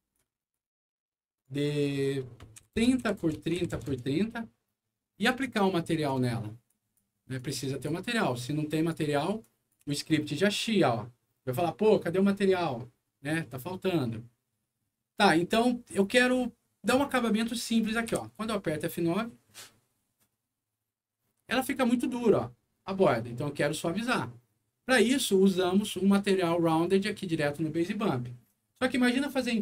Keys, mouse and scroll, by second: 0.3 click, 1.3 click, 1.6 click, 1.9 click, 2.6 KP_3, 2.8 KP_0, 2.8 Tab, 3.0 KP_3, 3.2 KP_0, 3.3 Tab, 3.6 Page_Down, 3.9 Return, 4.8 middle click, 4.8 scroll up 1, 5.7 click, 6.6 click, 7.3 click, 8.3 click, 9.4 click, 9.8 a, 12.7-14.6 scroll up 3, 13.1 middle click, 14.6 middle click, 16.2 scroll up 2, 16.8 middle click, 17.3 scroll up 2, 17.7 middle click, 18.1 F9, 23.6 click, 25.4 middle click.